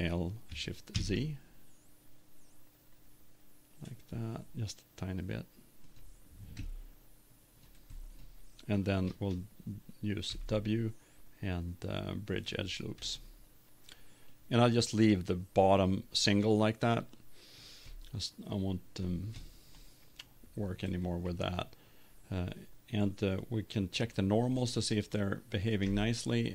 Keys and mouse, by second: 5.9 click, 6.5 click, 6.6 middle click, 7.0 click, 7.8-9.6 middle drag, 10.3 w, 13.1 middle click, 13.7 middle click, 14.9 middle click, 16.3 middle click, 17.2 middle click, 18.1 middle click, 18.8-19.8 drag, 20.0-21.3 middle drag, 24.0-25.6 drag, 25.7 click, 26.0-26.5 middle drag.